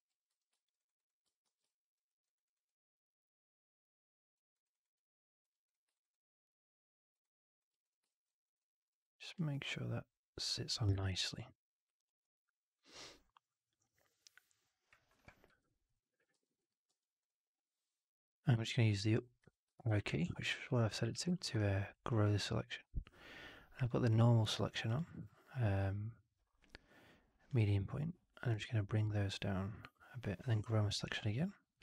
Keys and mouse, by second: 0.2 4, 0.7 right drag, 0.9 right drag, 1.4 shift+x, 2.0 alt+middle drag, 2.2 alt+right drag, 2.4 alt+right drag, 2.6-4.3 alt+drag, 4.5 alt+right drag, 4.6 alt+right drag, 4.9-5.3 alt+drag, 5.6 drag, 5.9 alt+right drag, 6.0-7.1 alt+drag, 7.1-7.5 alt+right drag, 8.0 alt+middle drag, 8.2 alt+right drag, 8.5-8.8 alt+drag, 10.9-13.6 alt+drag, 15.5 3, 16.3 4, 16.5 click, 16.8 3, 17.1-19.3 drag, 19.3 Up, 19.6 Up, 21.0 shift+x, 21.3 alt+middle click, 21.5 alt+right click, 22.0 alt+click, 27.2 click, 31.0 Up.